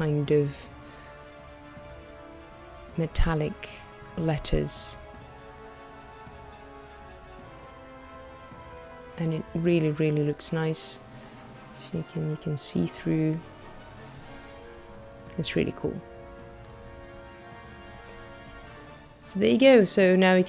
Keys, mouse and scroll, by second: 1.3 shift+middle click, 2.5-3.0 scroll down 3, 3.1 middle click, 5.3-5.9 scroll up 4, 6.2-6.8 scroll up 2, 6.9 middle click, 11.0-11.3 scroll up 2, 11.7 middle click, 14.4 middle click, 16.5-17.5 scroll down 8, 19.0 click.